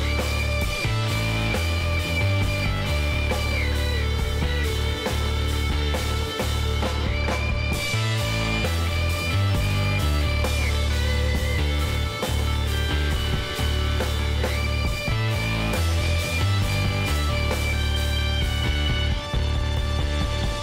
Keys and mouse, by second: 3.4-9.8 middle drag, 6.6 k, 10.4 ctrl+r, 13.6 middle click, 15.9 k, 18.9-20.6 middle drag.